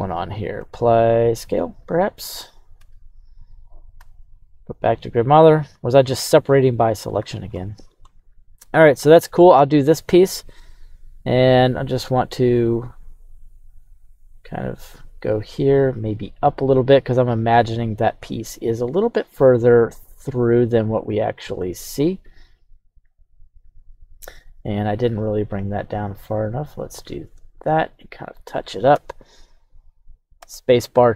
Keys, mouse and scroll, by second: 0.6 ctrl+a, 2.5 right click, 2.7 Tab, 3.1 right click, 3.9 q, 5.4-5.7 scroll.